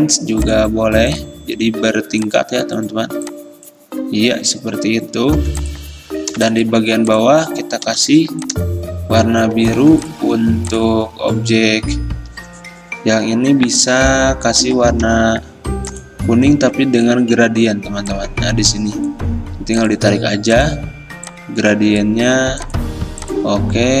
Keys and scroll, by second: 1.9 i, 5.5 v, 6.5 i, 15.1 i.